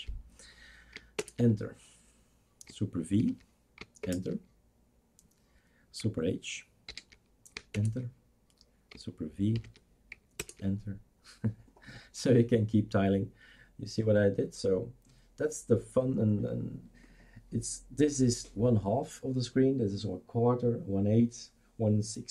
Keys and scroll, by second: 1.2 super+Return, 3.2 super+v, 4.0 super+Return, 6.9 super+h, 7.7 super+Return, 9.6 super+v, 10.4 super+Return.